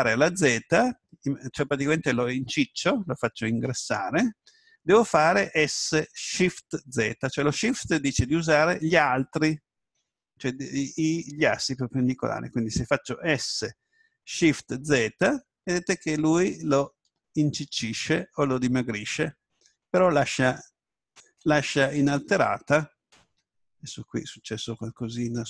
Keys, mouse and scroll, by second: 14.3 s, 21.1-21.7 shift+z, 21.7-23.0 drag, 23.4 Escape.